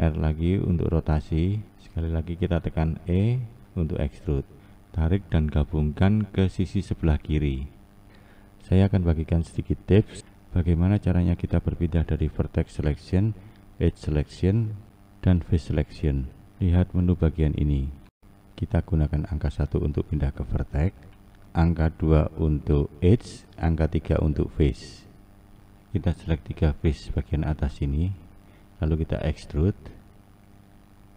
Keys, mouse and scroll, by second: 0.6 r, 4.1 e, 14.5 1, 15.6 click, 21.1 2, 23.3 3, 25.2 1, 25.6 Left, 25.8 Left, 26.6 shift+Left, 27.3 shift+Left, 28.3 e.